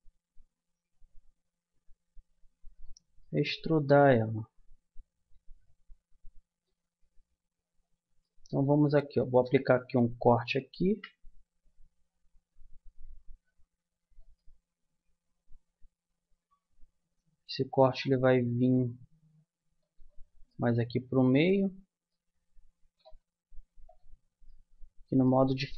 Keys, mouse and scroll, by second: 3.2 middle click, 8.2 middle click, 8.6 a, 10.6 ctrl+r, 20.5-21.7 middle drag, 21.9 middle click, 25.5 middle click.